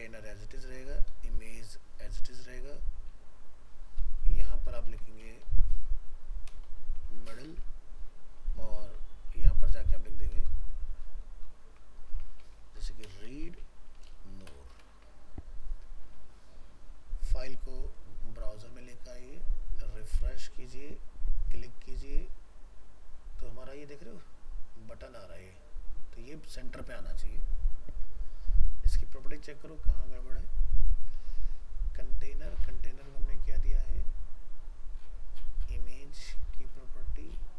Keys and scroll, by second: 4.9 ctrl+shift+Left, 8.8 ctrl+s, 10.5 ctrl+shift+Left, 14.9 ctrl+s.